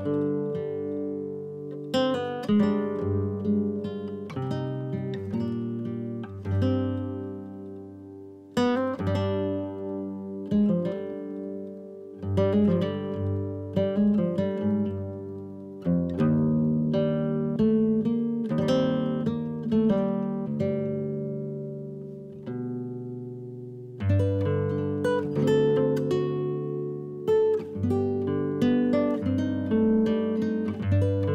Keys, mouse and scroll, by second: 0.5 middle click, 0.9 ctrl+z, 1.0-1.3 ctrl+z, 1.5 ctrl+z, 2.1 drag, 2.4 click, 2.8 ctrl+z, 3.4 ctrl+z, 3.7 ctrl+z, 3.9 ctrl+z, 4.2 ctrl+z, 4.6 click, 4.9 click, 5.2 click, 5.5 click, 6.0 ctrl+z, 6.1 ctrl+z, 6.2 ctrl+z, 6.4 ctrl+z, 6.9 ctrl+z, 7.6-8.1 middle drag, 8.1 KP_3, 8.4 KP_1, 9.1 ctrl+z, 9.3 ctrl+z, 9.5 ctrl+z, 9.7 ctrl+z, 9.8 ctrl+z, 10.0 ctrl+z, 10.2 ctrl+z, 10.3 ctrl+z, 10.6 ctrl+z, 11.4 ctrl+shift+z, 11.7 drag, 11.9-13.2 middle drag, 13.2 KP_3, 13.5 KP_1, 14.2 KP_Divide, 14.9-15.5 middle drag, 15.5 scroll down 2, 16.2 KP_Divide, 16.9 KP_Divide, 17.4 click, 17.9-18.3 scroll up 4, 18.3-19.1 shift+middle drag, 19.1 scroll up 2, 19.3-19.9 shift+middle drag, 19.9-20.3 scroll down 1, 20.3 click, 20.8 scroll down 1, 21.5 shift+click, 22.3 shift+click, 22.7-23.1 middle drag, 23.1 click, 23.8 shift+click, 24.6 shift+click, 25.1-25.5 middle drag, 25.5 shift+click, 25.9 shift+click, 26.4-27.2 middle drag, 27.2 KP_Divide, 27.9 s, 28.8 s, 29.4 KP_1, 29.9 KP_Divide, 30.6 scroll up 2, 30.9 scroll down 3, 31.1 middle click.